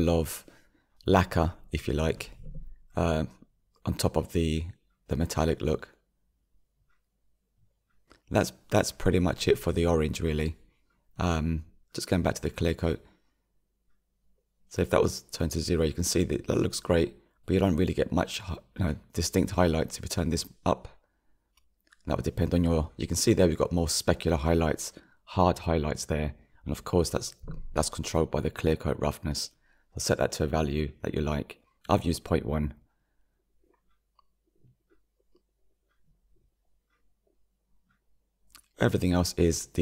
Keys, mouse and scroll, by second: 6.6-8.7 scroll down 6, 8.7-9.4 middle drag, 9.4-10.8 scroll up 1, 12.8-14.8 scroll up 1, 14.8-17.0 drag, 17.0-22.3 middle drag, 22.3-25.0 drag, 25.0-28.8 middle drag, 28.8-39.8 drag.